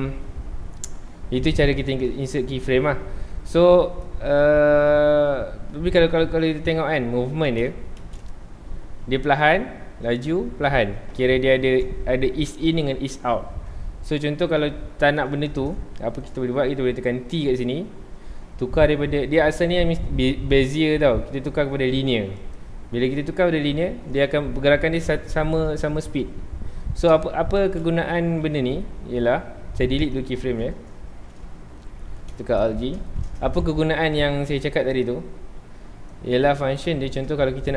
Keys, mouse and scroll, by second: 0.0 scroll down 2, 0.0-1.9 scroll up 2, 2.1-4.4 drag, 4.4-4.8 scroll down 2, 4.8-6.2 middle drag, 6.2-6.6 scroll up 2, 6.6 shift+middle drag, 6.8-7.2 scroll up 2, 7.2-8.0 middle drag, 8.0 space, 8.5 scroll down 2, 14.4 click, 17.2 t, 27.6 space, 29.2 x, 31.7 alt+g, 32.1-32.5 scroll up 2, 32.5 shift+middle drag, 32.7-33.0 scroll up 2, 33.0-33.6 shift+middle drag, 34.5 Escape, 35.0-36.5 drag, 36.5-37.7 middle drag.